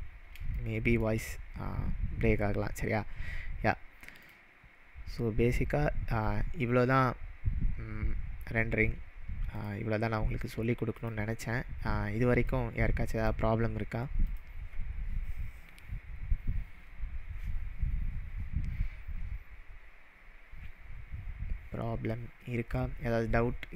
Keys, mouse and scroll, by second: 0.0-0.5 scroll down 2, 0.5-1.1 shift+middle drag, 4.2 click, 5.1-5.7 scroll up 2, 9.6 click, 11.0 click, 12.5-13.3 drag, 14.2 click.